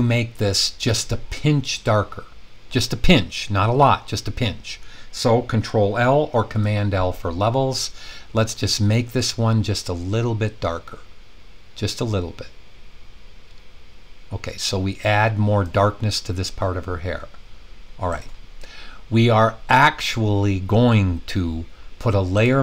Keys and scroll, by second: 6.4 super+i.